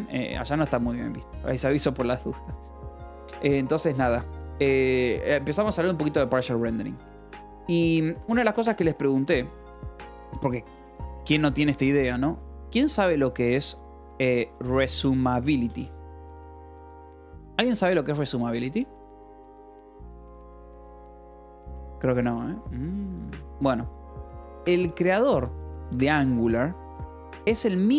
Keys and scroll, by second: 5.9 o, 6.0 Return, 7.1-9.8 typing, 7.5 Escape, 14.5-17.9 typing, 20.4 Escape, 27.7 o.